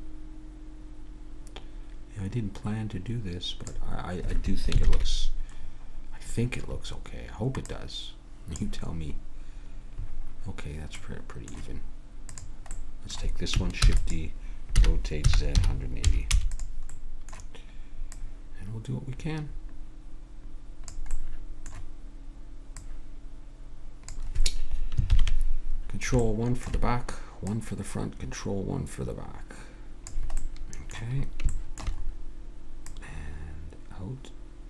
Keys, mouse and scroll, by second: 4.8 ctrl+KP_3, 5.0-7.6 middle drag, 7.7 click, 9.4-12.2 middle drag, 12.2-13.8 right drag, 13.8 shift+d, 14.7 r, 17.0 middle click, 18.1-19.9 drag, 21.1-22.8 middle drag, 22.8-24.5 drag, 25.1 ctrl+KP_1, 26.2 middle click, 27.5 middle click, 30.4-32.9 middle drag, 32.9-34.6 drag.